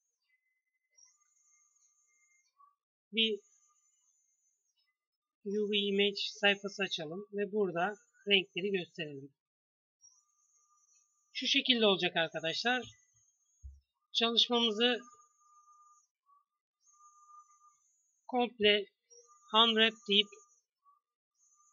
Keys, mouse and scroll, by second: 7.3 click, 12.0 KP_3, 13.1 KP_1, 16.0 Tab, 17.5 a, 17.7 a, 18.5 u, 21.2 s.